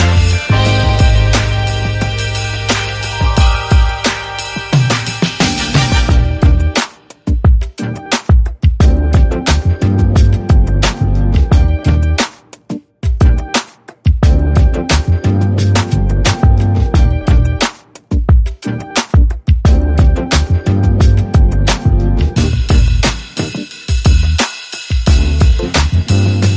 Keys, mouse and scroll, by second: 0.4 shift+click, 8.3 shift+click, 10.2 ctrl+Right, 10.4 ctrl+Right, 10.6 ctrl+Right, 10.8 ctrl+Right, 13.7 Right, 13.7 ctrl+click, 15.6 shift+click, 18.3 Right, 18.5 Right, 19.7 ctrl+Down, 19.9 ctrl+Down, 20.2 ctrl+Right, 20.4 ctrl+Right, 20.6 ctrl+Right, 20.7 ctrl+Right, 20.9 ctrl+Right, 21.0 ctrl+Right, 21.1 ctrl+Right, 22.7 shift+click.